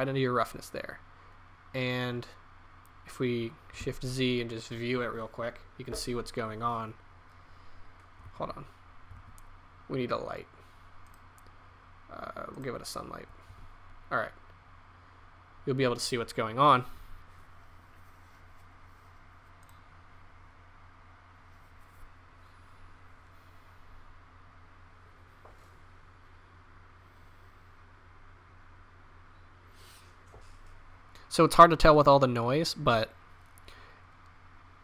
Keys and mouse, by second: 4.2 shift+z, 8.8 shift+z, 9.5 shift+a, 13.9 shift+z, 20.7 click.